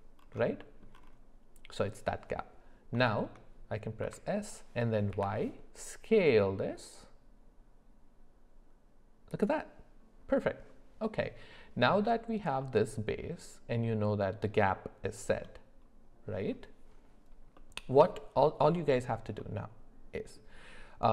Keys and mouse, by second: 3.1 shift+middle click, 4.0 s, 12.6-15.3 middle drag, 17.5 middle click, 19.4-20.3 middle drag.